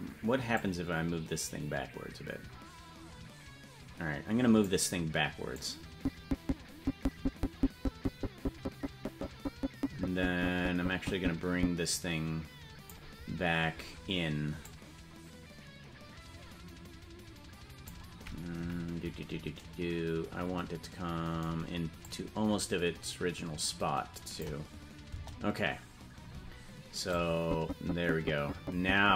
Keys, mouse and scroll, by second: 0.5-5.5 drag, 6.1-13.2 drag, 14.9-18.5 drag, 18.9 KP_Decimal, 22.4-25.0 drag, 25.5 KP_0, 27.5-29.1 drag.